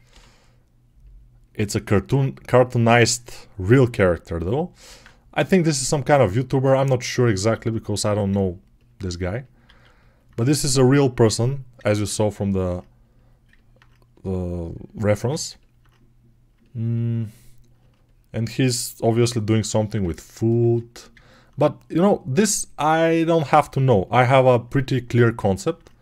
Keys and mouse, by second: 4.7 alt+q, 9.5 alt+q, 15.2-21.1 ctrl+alt+right drag.